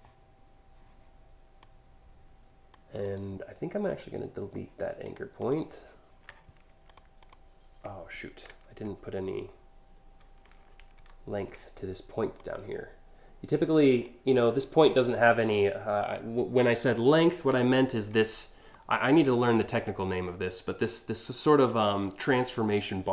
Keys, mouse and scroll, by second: 1.3-2.3 drag, 2.6 right click, 3.5 click, 4.7 click, 5.0 click, 6.5 click, 6.8 click, 8.1 ctrl+z, 8.4 ctrl+z, 10.6 ctrl+alt+z, 12.0-13.6 drag.